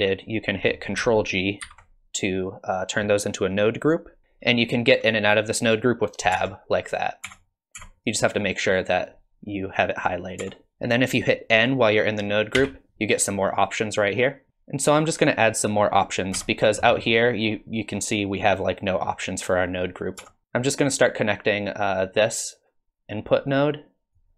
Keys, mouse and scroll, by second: 1.6 ctrl+g, 6.3 Tab, 7.2 Tab, 7.7 Tab, 8.3 click, 9.0 click, 10.4 Tab, 12.6 n, 14.5 middle click, 14.5 click, 14.5 scroll up 4, 16.3 Tab, 16.8 middle click, 20.2 Tab, 21.8 click, 24.1 click.